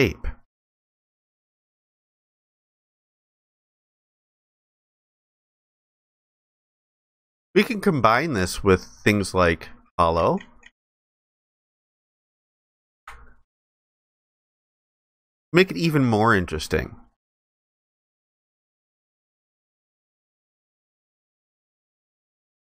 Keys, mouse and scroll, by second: 2.8 ctrl+alt+click, 13.8 alt+click, 15.7 alt+click.